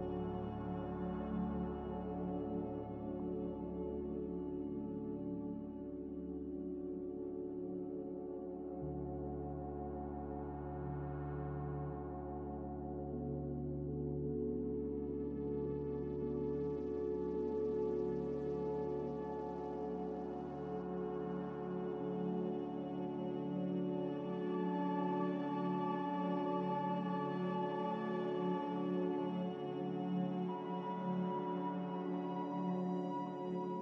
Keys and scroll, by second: 13.8 3, 18.3 3, 22.6 3, 26.0 3.